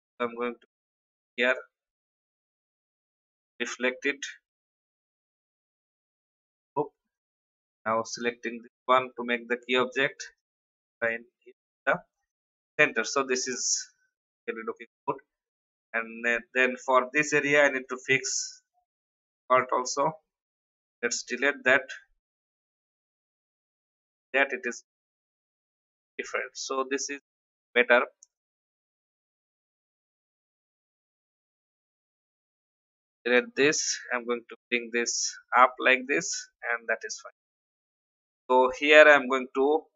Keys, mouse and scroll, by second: 2.2 ctrl+r, 3.3 click, 4.6 ctrl+g, 5.2 click, 6.2 ctrl+g, 7.1 shift+click, 8.1 click, 11.5 alt+scroll up 1, 12.5 click, 13.3-13.9 scroll down 1, 14.8 click, 20.7 Delete, 21.9 scroll down 1, 22.5 click, 23.9 shift+Down, 25.8 click, 27.0 scroll up 1, 28.3 click, 32.4 Delete, 33.3 click, 34.4 shift+Up, 36.0 click, 36.5 alt+scroll down 1, 37.1 click.